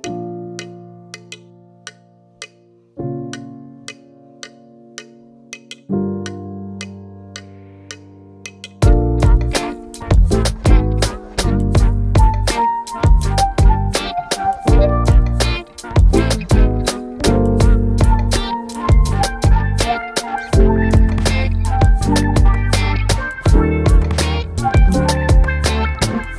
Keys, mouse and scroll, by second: 2.1 click, 4.6-9.0 shift+drag, 12.1 click, 16.4 ctrl+Num_Lock, 16.4 click, 17.2 ctrl+d, 20.6 v, 24.7 right click.